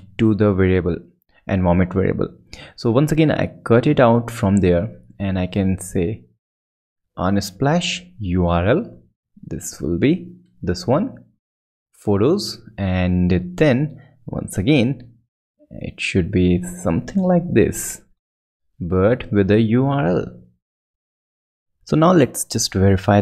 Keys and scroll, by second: 0.0 shift+Right, 4.0 alt+super+Right, 5.2 alt+shift+super+Right, 5.3 alt+shift+super+Down, 5.9 Right, 6.3 BackSpace, 6.8 shift+BackSpace, 8.5 shift+Right, 10.2 shift+super+BackSpace, 15.2 shift+Right, 16.1 alt+shift+super+Right, 16.6 shift+Left, 17.4 super+Right, 17.9 super+Right, 18.4 super+BackSpace, 18.9 shift+BackSpace, 20.1 shift+super+BackSpace.